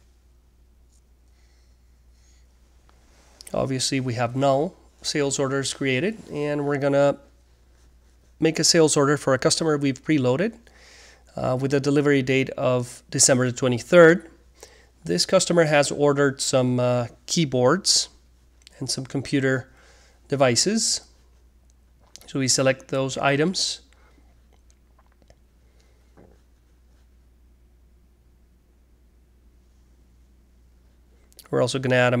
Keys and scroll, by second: 7.7-8.8 typing, 19.2-21.3 typing, 26.0-27.3 typing, 30.3-31.6 typing.